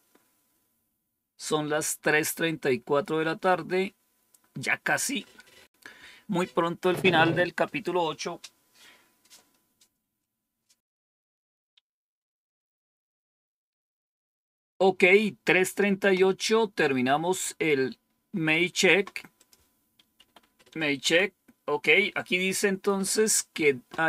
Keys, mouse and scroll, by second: 19.2 click, 20.1 Home, 20.9 End.